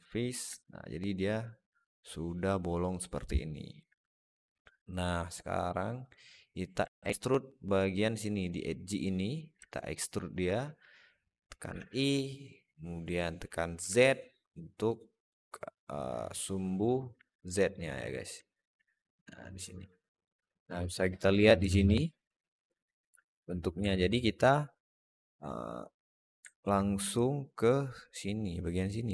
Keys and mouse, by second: 0.4-3.6 alt+middle drag, 5.9 right click, 6.8 alt+middle click, 9.5 alt+shift+middle click, 10.0 alt+shift+middle click, 10.3 alt+middle click, 11.5 e, 17.1 alt+shift+middle click, 17.4 alt+middle click, 18.3 alt+middle click, 19.0 click, 19.8 alt+middle click, 23.8 alt+middle click, 26.3 alt+middle click, 27.0-29.0 drag.